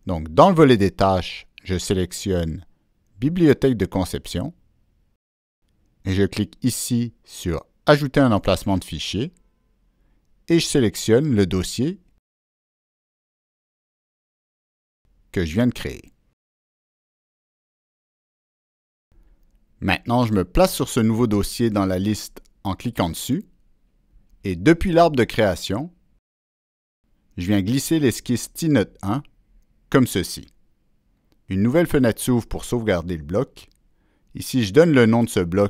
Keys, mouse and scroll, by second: 1.4 click, 1.6 click, 3.9 click, 7.3 click, 8.8 click, 11.9 click, 12.5 click, 12.8 click, 15.1 click, 15.9 click, 16.6 click, 16.8 click, 18.1 click, 20.3 click, 23.3 click, 23.4 click, 25.5-27.2 drag, 29.9 click.